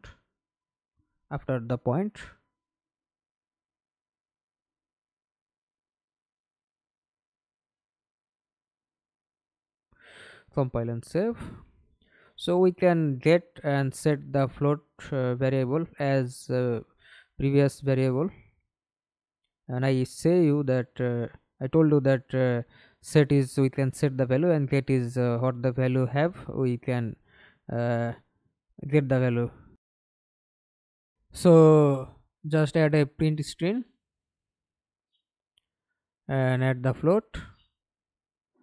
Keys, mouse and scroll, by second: 0.0-0.8 typing, 1.3 Return, 6.7 BackSpace, 9.8 0, 10.1 Return, 15.5 double click, 17.0-19.6 scroll up 9, 19.6 scroll down 2, 19.9-20.2 scroll up 2, 20.2 right click, 21.2-26.4 typing, 28.9 Delete, 31.1-32.1 typing, 32.2 Return, 37.4 double click.